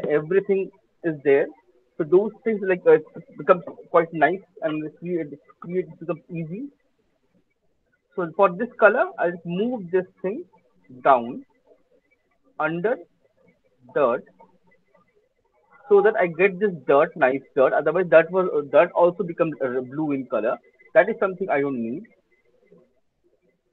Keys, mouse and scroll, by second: 7.2 click, 7.6 middle click, 8.2 middle click, 10.8 click, 11.4 middle click, 15.4 click, 22.2 right click, 23.3 alt+right click.